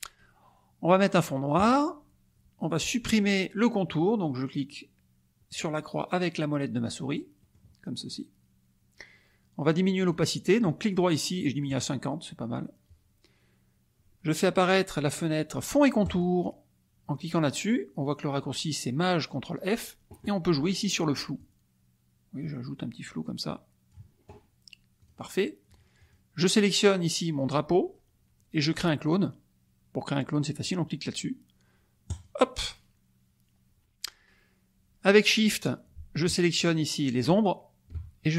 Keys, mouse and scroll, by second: 1.7 click, 7.5 click, 10.1 right click, 11.7 click, 16.0 click, 21.3-24.1 drag, 25.0 click, 25.9 click, 32.1 click, 36.6 shift+click.